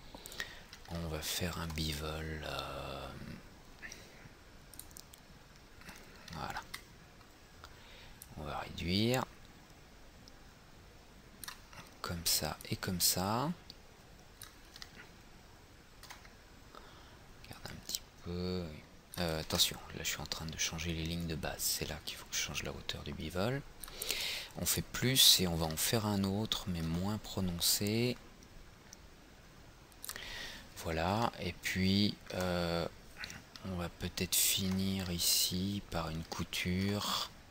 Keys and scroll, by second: 19.5 ctrl+z.